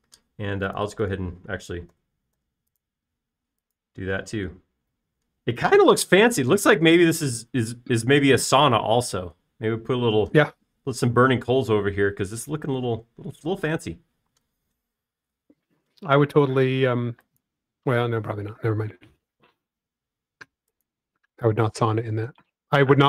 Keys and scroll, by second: 3.6 typing, 4.9 typing.